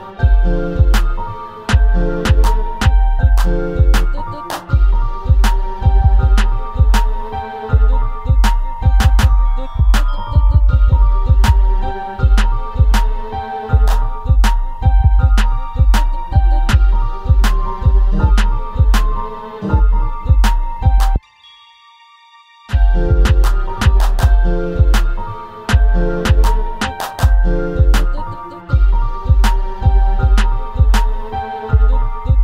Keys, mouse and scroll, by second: 4.0 click, 4.7 alt+a, 5.2-5.7 scroll down 2, 5.7-7.1 middle drag, 7.1-7.7 scroll down 3, 7.7 middle click, 8.5 click, 8.9-10.4 middle drag, 10.4 KP_0, 11.2-11.9 scroll up 2, 13.8 alt+a, 18.5 click, 28.4 click.